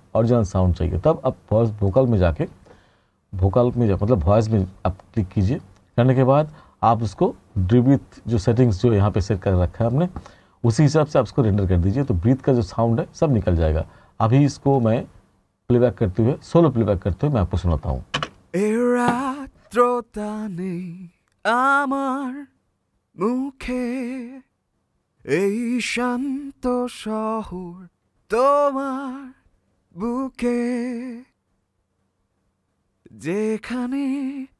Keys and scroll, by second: 18.2 space.